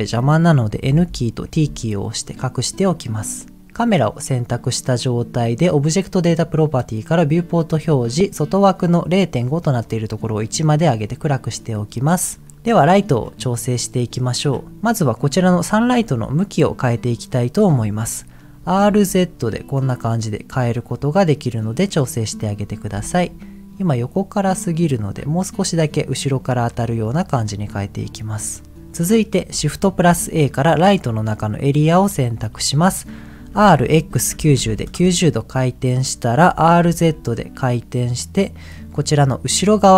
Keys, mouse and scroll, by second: 0.8 n, 1.4 t, 3.1-3.5 scroll up 2, 5.7 click, 7.2 click, 7.6-8.1 scroll down 2, 9.8 click, 12.5 scroll down 5, 12.5 middle click, 12.8-13.6 scroll up 5, 13.7 middle click, 14.1-14.7 scroll down 4, 14.8 middle click, 15.4 click, 16.0-16.5 scroll up 2, 16.6 click, 17.1 click, 17.7 middle click, 18.5 r, 18.8 z, 22.2 right click, 22.8 r, 26.6 click, 28.5 middle click, 29.1 middle click, 29.7 shift+a, 33.4 r, 33.8 x, 34.3 KP_9, 34.6 KP_0, 34.9 KP_Enter, 36.5 r, 36.8 z, 38.6 click.